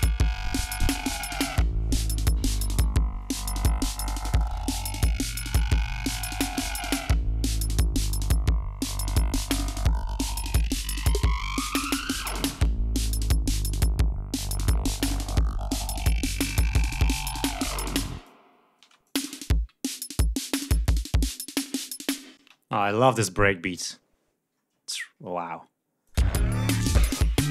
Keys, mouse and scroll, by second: 7.8 scroll up 2, 8.5-8.9 scroll down 2, 9.5-11.5 scroll down 8, 11.9-12.8 scroll down 5, 13.0 ctrl+scroll up 2, 13.4 ctrl+scroll down 2, 13.8 scroll up 2, 17.4 click, 18.7 space, 18.9 click, 19.3 ctrl+scroll up 2, 20.6 ctrl+scroll down 2, 22.2 space, 25.1-25.5 ctrl+scroll down 2, 25.9 ctrl+click, 26.1 space, 27.3-27.5 scroll up 2.